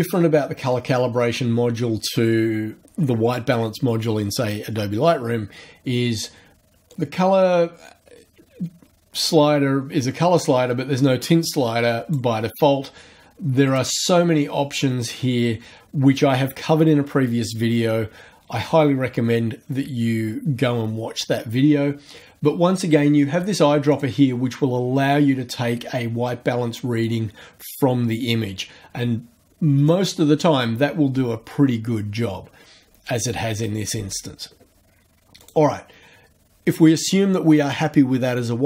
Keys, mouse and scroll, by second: 6.9-12.3 drag, 13.6 click, 23.9 click, 29.8 click, 35.4 click.